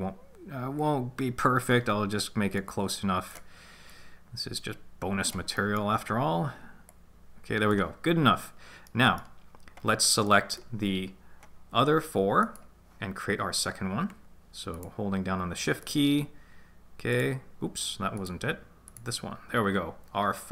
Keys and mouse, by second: 0.7 click, 0.9-2.8 drag, 4.0 click, 5.5 middle click, 6.8 click, 7.0 click, 8.8 middle click, 10.2 middle click, 12.4 right click, 14.7 shift+right click, 17.1 shift+right click, 18.1 shift+right click, 18.8 shift+right click.